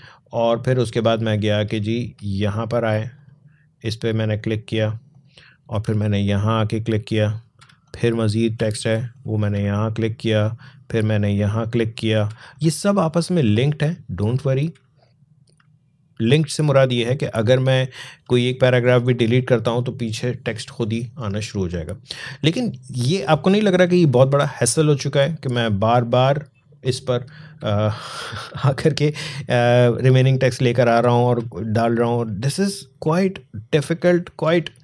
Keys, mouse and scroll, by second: 1.0 scroll up 1, 3.0 click, 4.7 space, 5.0 click, 5.2 space, 6.9 click, 7.5 space, 7.7 click, 8.0 space, 9.0 click, 9.4 space, 9.6 click, 10.0 space, 11.4 click, 12.2 space, 12.4 click, 12.8 space, 14.2 click, 14.6 space, 14.9 click, 15.3 space, 16.6 click, 18.2 alt+scroll down 1, 23.8 click, 27.5 space, 27.7 click, 28.0 space, 29.0 click, 31.3 space, 31.6 click, 31.8 space, 32.5 click.